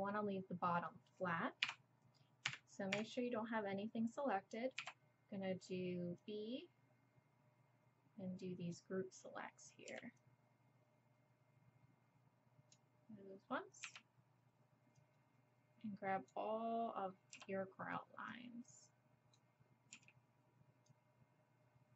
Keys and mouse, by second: 1.6 KP_7, 2.5 a, 2.9 a, 4.8 b, 9.9 b, 13.8 b, 17.3 b, 19.9 b.